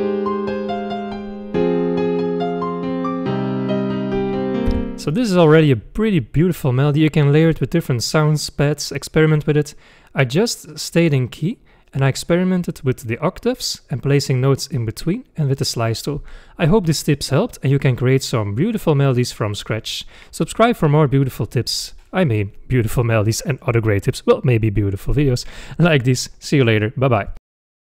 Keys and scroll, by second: 4.8 space.